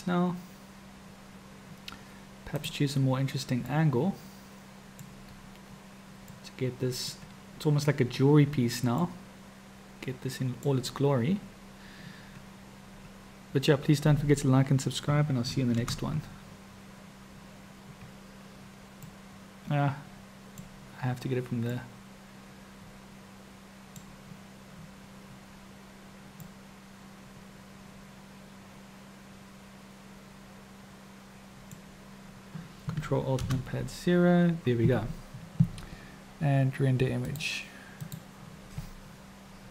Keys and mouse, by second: 2.7-3.0 drag, 4.1-5.3 middle drag, 6.6-7.5 middle drag, 9.4-10.7 middle drag, 10.7 drag, 15.9 ctrl+alt+KP_0, 19.5 click, 22.2-24.3 drag, 26.7-30.6 middle drag, 30.6 click, 31.4-32.1 middle drag, 33.6 ctrl+alt+KP_0, 37.3-38.4 drag.